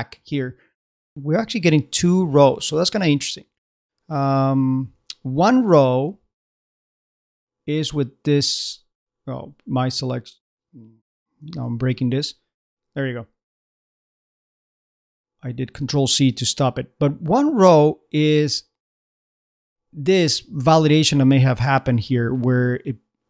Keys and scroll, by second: 11.6 ctrl+c.